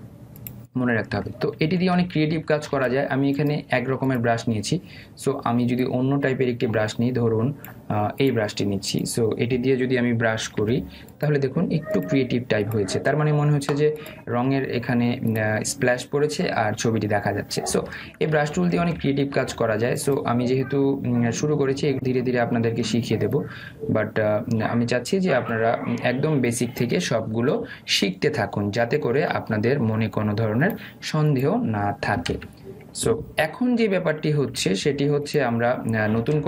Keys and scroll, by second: 2.5 ctrl+alt+z, 19.0 ctrl+alt+z, 33.3 ctrl+alt+z.